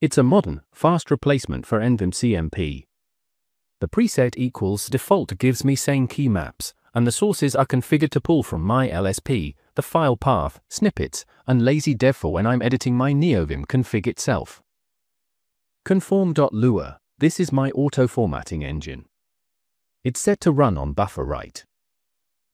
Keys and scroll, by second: 1.5-5.7 typing, 7.1 ~, 7.5 /, 8.1 Down, 8.2 Down, 8.3 Down, 8.4 Down, 8.9 Up, 9.1 Up, 9.2 Up, 9.4 Down, 9.5 Down, 9.6 Escape, 9.8 Escape, 10.1 Escape, 10.2-18.8 typing, 19.1 Escape, 21.2 space, 21.2 f, 22.1 Escape.